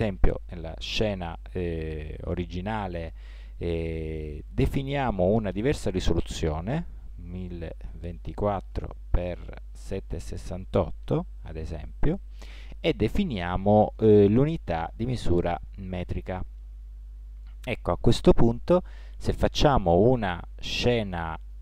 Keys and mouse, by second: 14.3-21.6 drag.